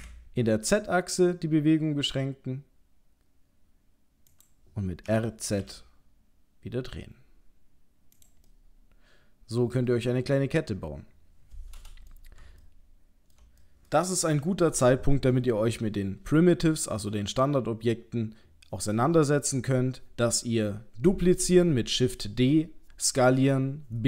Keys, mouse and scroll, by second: 8.4 middle click, 12.6 ctrl+middle click.